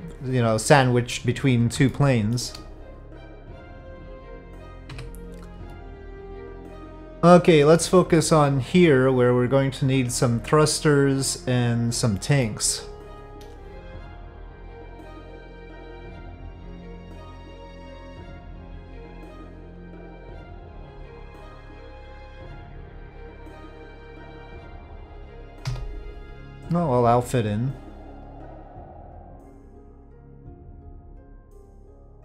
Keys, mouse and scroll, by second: 1.9-2.3 shift+middle drag, 3.7 middle click, 4.9 KP_Divide, 5.7-12.4 middle drag, 18.1-19.9 drag, 20.7-21.6 middle drag, 22.5-23.5 middle drag, 25.5 KP_5, 25.6 KP_7, 27.2-29.5 drag.